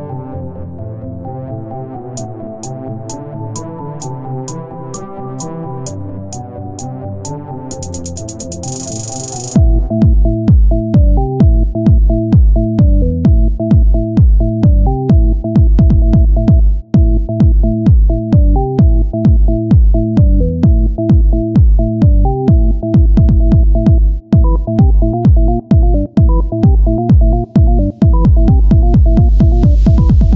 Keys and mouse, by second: 0.7-1.9 right drag, 2.9 ctrl+Tab, 6.0 e, 7.2 s, 8.9-10.8 drag, 10.8 KP_1, 11.5 Tab, 13.9-15.6 drag, 16.0 click, 16.7 KP_1, 18.7-20.0 drag, 20.4-21.7 drag, 22.6 r, 23.6-24.9 drag, 24.9 middle click, 25.3 middle click, 27.8-30.3 drag.